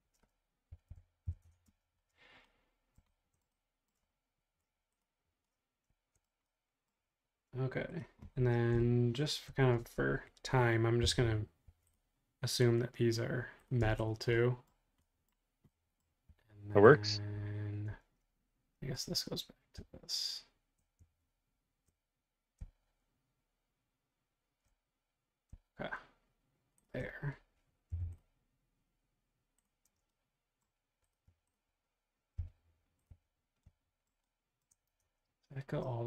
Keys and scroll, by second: 0.4-2.4 typing, 11.0 m, 13.7 space, 16.2 r, 27.9 p, 29.9 space, 32.4 m, 35.1 super+Tab.